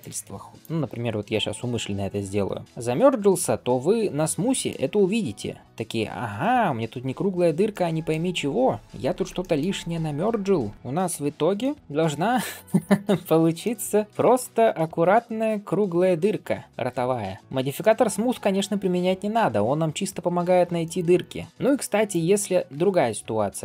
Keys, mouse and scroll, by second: 1.7 m, 2.6 Tab, 2.9-3.2 scroll down 2, 3.5-4.7 middle drag, 3.5-4.2 scroll down 2, 4.7 scroll up 2, 6.3 scroll up 1, 6.5 scroll down 1, 7.6-8.1 middle drag, 8.1-8.9 scroll up 2, 9.2 shift+middle drag, 10.2 scroll down 2, 10.5 scroll up 1, 10.7 click, 10.7 middle click, 10.9 alt+b, 11.4-11.8 middle drag, 11.9 scroll up 2, 12.3 shift+middle click, 12.7 middle click, 13.1 alt+shift+z, 13.5-14.1 middle drag, 14.3 ctrl+space, 14.7 shift+middle drag, 15.0-15.7 scroll up 2, 15.3-17.4 middle drag, 17.4 scroll down 1, 17.6 shift+middle click, 18.0 scroll up 2, 18.4-20.1 middle drag, 20.3 scroll down 1, 20.7 shift+middle click, 21.0-21.4 middle drag, 21.5 shift+middle drag, 21.5 scroll up 2, 21.9 click, 22.3-22.6 scroll up 1, 22.6 Tab.